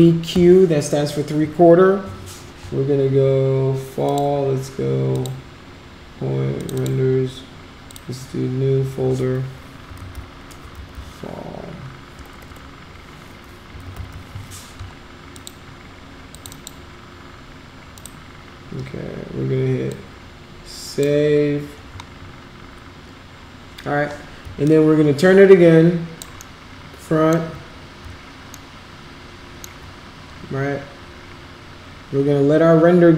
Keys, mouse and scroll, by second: 0.3 q, 4.1 click, 5.1 click, 6.6 click, 6.8 click, 7.9 click, 9.7-10.8 typing, 12.3 BackSpace, 13.8 a, 15.4 click, 16.3 click, 16.5 click, 18.0 click, 19.9-21.0 drag, 24.7-26.2 alt+drag, 26.4 alt+middle click, 28.7 alt+middle click.